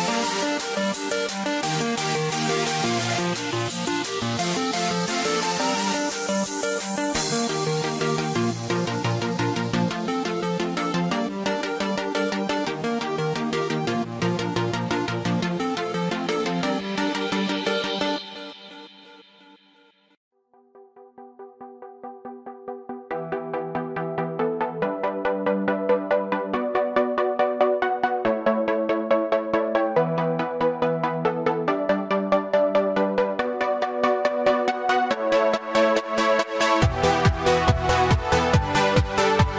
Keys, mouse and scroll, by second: 0.8 click, 1.4 middle click, 3.4 middle click, 5.8 ctrl+r, 9.1 middle click, 10.6 ctrl+r, 14.5 middle click, 16.1 k, 20.6 click, 21.1 middle click, 22.6 scroll up 1, 25.1 alt+click, 26.2 alt+click, 26.3 click, 27.5 click, 27.6 alt+click, 29.0 click, 30.4 click, 30.5 click, 33.3 ctrl+z, 34.0 ctrl+z, 34.1 x, 37.1 ctrl+z, 37.7 x, 39.3 click.